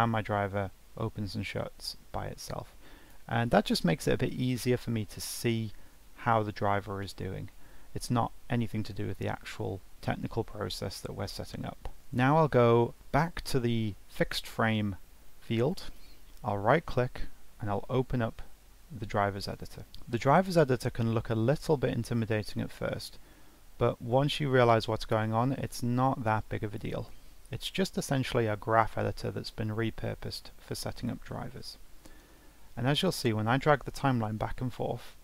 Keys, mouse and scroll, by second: 12.0 click, 15.8-19.0 right drag, 32.7-35.2 drag.